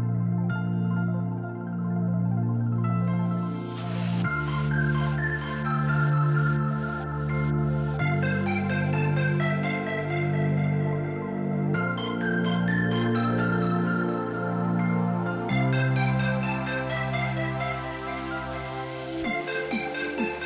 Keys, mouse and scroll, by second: 0.3 scroll down 1, 0.4 middle click, 4.8 middle click, 5.4 right click, 13.7 right click.